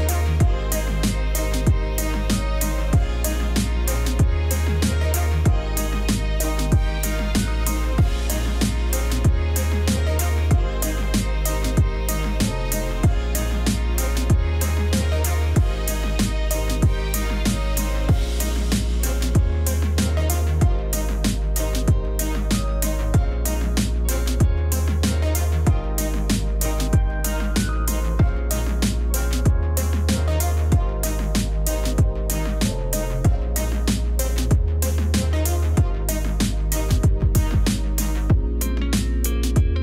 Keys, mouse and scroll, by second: 4.9 Return, 7.0 ctrl+z, 9.8 ctrl+z, 10.4 ctrl+z, 17.8 ctrl+u, 22.2 Return, 23.6 [, 24.8 Return, 25.1 [, 25.7 ], 28.3 z, 30.3 ctrl+0, 34.5 alt+click, 35.5 alt+click, 35.9 ], 39.7 ctrl+u.